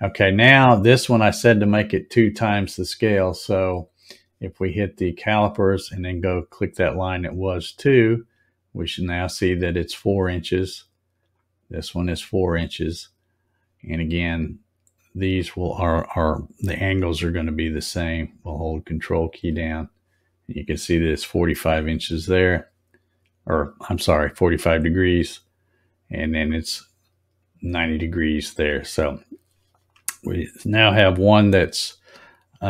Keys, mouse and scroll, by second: 5.0 click, 7.3 click, 11.2 click, 15.2 click, 19.0 ctrl+click, 22.3 click, 24.3 ctrl+click, 26.3 ctrl+click, 28.9 click, 29.9-30.2 scroll up 2, 30.6-31.4 scroll up 4.